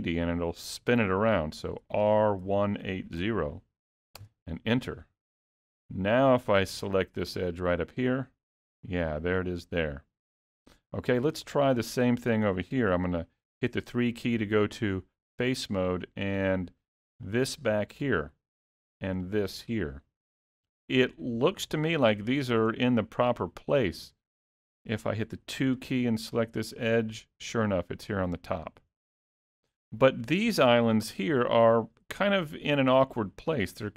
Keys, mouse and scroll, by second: 1.9 r, 5.8 middle click, 6.8 2, 8.0 click, 13.0 3, 16.3 middle click, 17.4 click, 18.0 middle click, 19.3 shift+click, 19.9 middle click, 20.8 shift+middle click, 22.0 scroll up 3, 22.3 shift+middle click, 22.9-23.8 scroll down 1, 25.0 middle click, 25.5 2, 26.5 click, 29.4-29.8 scroll down 3, 30.9 scroll up 1, 31.3 shift+middle click.